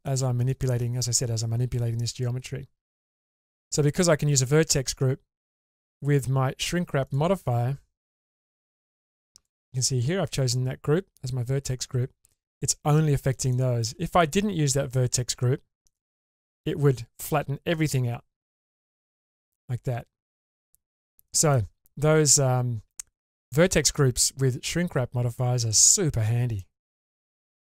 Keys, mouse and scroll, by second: 0.5 shift+middle click, 2.0-2.4 scroll down 2, 2.4-3.8 middle drag, 5.6 click, 7.0 click, 8.6 click, 12.3-13.4 middle drag, 13.5 shift+middle click, 15.8 click, 16.6-21.6 middle drag, 21.0 click, 26.2 scroll down 2, 26.6 middle click, 27.2-27.6 shift+middle drag.